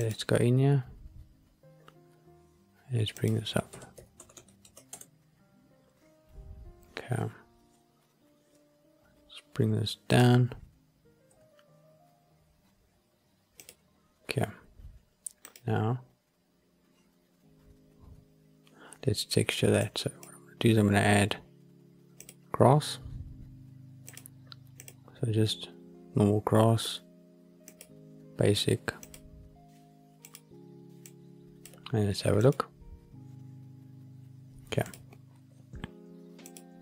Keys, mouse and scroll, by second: 0.2 click, 3.1-4.9 drag, 4.2 KP_0, 10.0 click, 11.2 g, 13.5 click, 15.4-18.1 drag, 19.7 click, 22.1 click, 23.9-29.2 drag, 30.2 click, 30.9 click, 32.6 click, 35.1 click, 36.4 click.